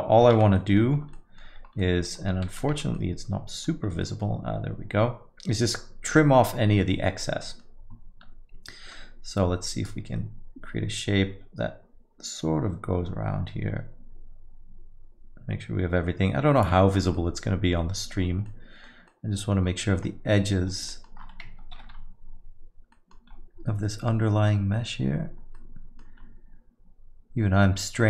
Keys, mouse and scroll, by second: 0.4 shift+z, 0.6 middle click, 0.9-1.9 scroll up 4, 1.1 middle click, 1.8 middle click, 2.1-3.3 scroll down 4, 3.3 Tab, 3.9 scroll up 2, 4.0 middle click, 7.4 middle click, 9.8 click, 17.4 middle click, 17.9-18.5 scroll up 9, 18.5 middle click, 19.1 middle click, 19.6-20.5 scroll down 13, 20.4-20.9 scroll up 4, 20.9 middle click, 21.9 ctrl+i, 22.9 middle click, 23.2 scroll up 3, 24.1-24.5 scroll down 5, 24.8 scroll up 2, 25.5 middle click, 26.2 scroll up 2.